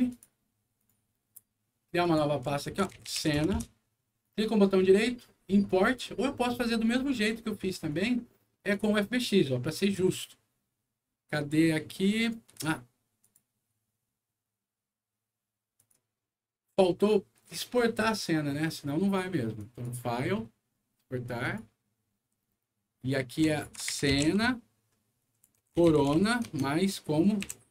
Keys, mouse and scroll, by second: 0.0 click, 0.7 right click, 1.9 click, 2.3-3.6 typing, 4.1 right click, 5.6 click, 7.8 click, 8.6 click, 9.7 click, 12.3 scroll down 2, 13.1 click, 15.7 click, 19.5 click, 21.3 click, 23.3-27.3 typing.